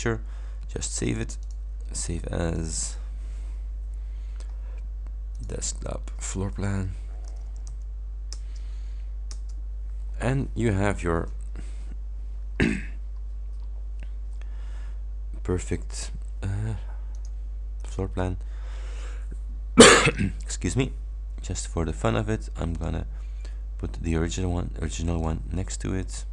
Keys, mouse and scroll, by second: 1.5 click, 2.6 click, 5.4 click, 6.6-8.2 typing, 8.6 Return, 9.4 Return, 11.9-12.6 ctrl+scroll down 4, 12.8-13.2 ctrl+scroll up 3, 17.2 click, 20.1 click, 22.8 click, 25.2 click.